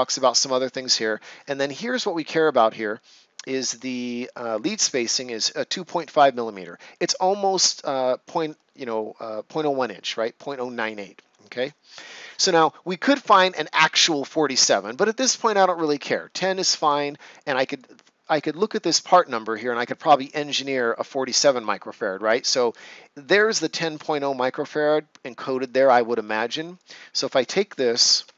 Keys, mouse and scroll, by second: 11.8 scroll up 1, 17.7 click, 26.7 click, 28.2 ctrl+c.